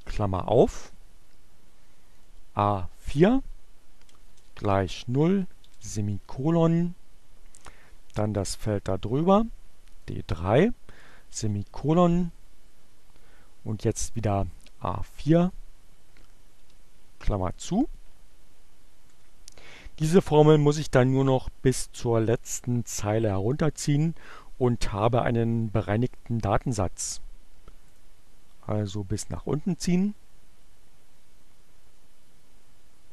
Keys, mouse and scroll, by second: 1.4 click, 2.2 click, 3.6 shift+o, 4.4 shift+,, 7.1 click, 9.0 click, 9.8 shift+,, 12.7-13.7 drag, 14.4 click, 15.1 shift+9, 17.0 Return, 27.1 click, 28.0-33.1 drag.